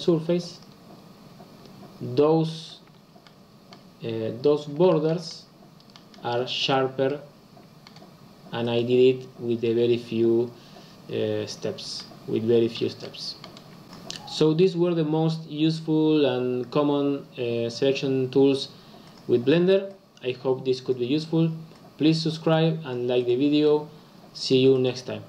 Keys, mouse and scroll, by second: 0.8 click, 2.9 Tab, 3.3-6.0 middle drag, 6.0-7.1 scroll up 3, 7.1-11.4 middle drag, 11.4-12.0 scroll down 2, 12.0-13.8 middle drag.